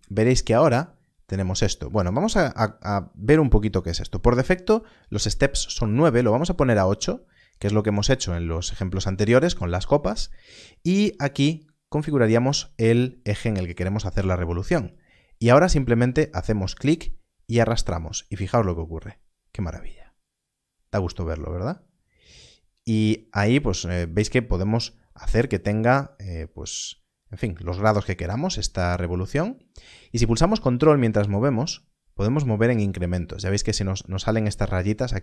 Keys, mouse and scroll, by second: 11.3 click, 16.6 click.